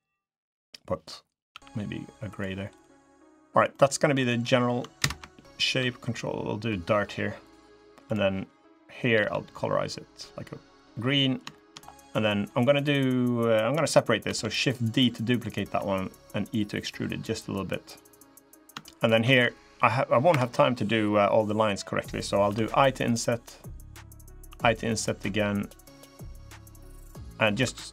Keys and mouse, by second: 1.4 g, 2.8 click, 3.5 click, 4.8 ctrl+KP_Add, 5.5 g, 7.8 g, 8.9 g, 10.9 click, 11.3 shift+click, 14.0 shift+d, 15.5 e, 18.6 shift+click, 19.1 ctrl+r, 22.3 i, 24.2 i, 27.4 3.